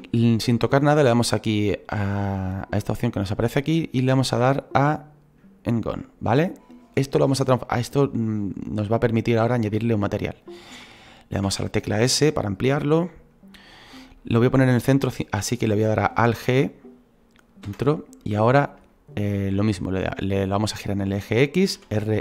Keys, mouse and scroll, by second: 16.3 alt+g.